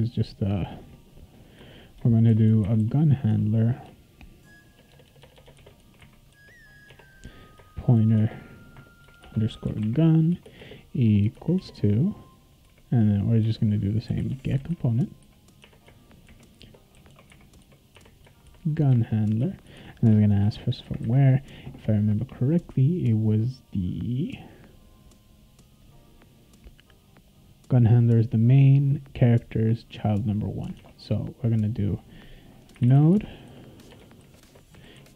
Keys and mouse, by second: 0.6 click, 1.6 Return, 2.0-3.9 typing, 3.3 Tab, 4.9-6.8 typing, 6.9 Tab, 7.9-11.5 typing, 12.6-15.2 typing, 15.6 Tab, 16.2-20.6 typing, 25.8 click, 27.3 click, 30.8 alt+Tab, 32.5-35.1 typing.